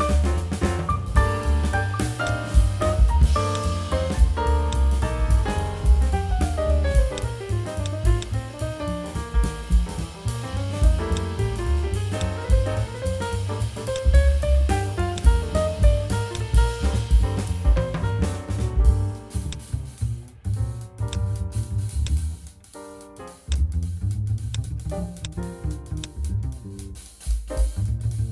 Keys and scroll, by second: 2.8 7, 12.2 /.